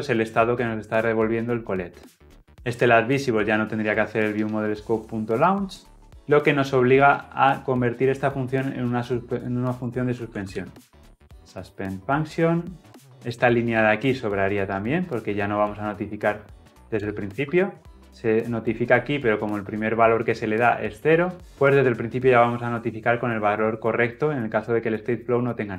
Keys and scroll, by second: 11.2 Return.